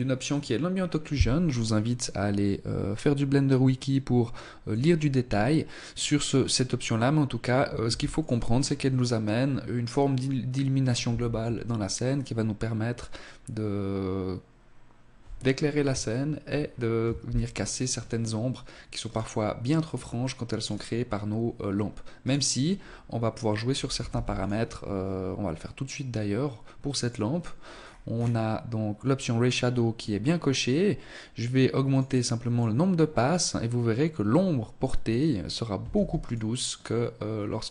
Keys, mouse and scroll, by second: 0.5 click, 6.9 ctrl+s, 16.3 scroll down 1, 17.0-18.1 scroll down 2, 18.1 right click, 18.9 right click, 19.7 right click, 21.3 right click, 21.7 scroll up 2, 23.1 ctrl+s, 24.4 scroll down 2, 26.0 click, 26.8-27.7 scroll down 5, 29.0 scroll up 2, 30.9 click, 31.1 click, 31.3 click, 31.5 click, 34.9 ctrl+s, 37.1-37.7 scroll up 1.